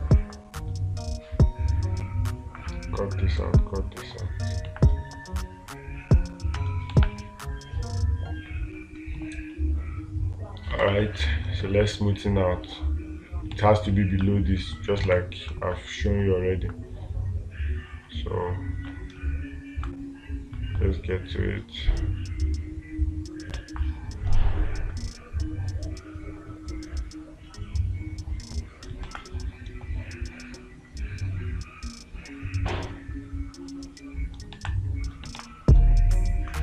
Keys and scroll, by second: 7.4 space, 11.3 space, 14.0 space, 24.0 space, 29.5 space, 35.0 space, 35.8 space.